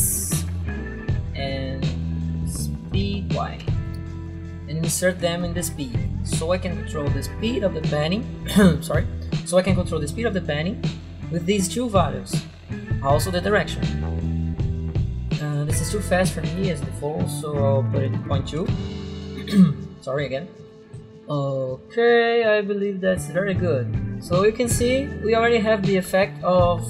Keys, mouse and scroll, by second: 0.0-1.1 typing, 1.6 click, 2.5 End, 2.6 Left, 3.0 shift+Home, 3.4-4.4 typing, 5.1 click, 11.6 click, 13.6 click, 14.3 click, 16.1 click, 17.4 click, 18.1-18.9 typing.